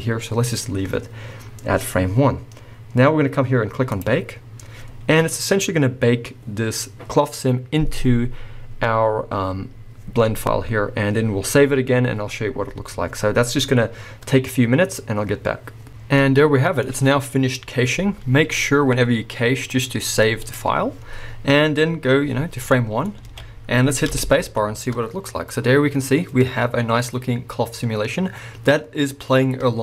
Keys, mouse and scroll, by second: 2.0-4.0 scroll down 1, 16.2-19.7 middle drag, 19.7-22.7 drag, 22.7-29.8 middle drag, 23.2 alt+a, 24.1 space.